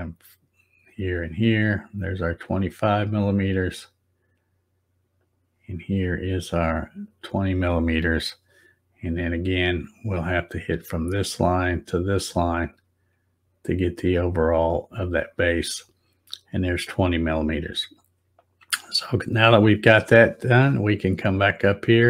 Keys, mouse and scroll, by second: 0.9 click, 3.2 click, 5.2 click, 7.1 click, 10.4 click, 12.5 click, 14.3 click, 19.0 scroll up 1.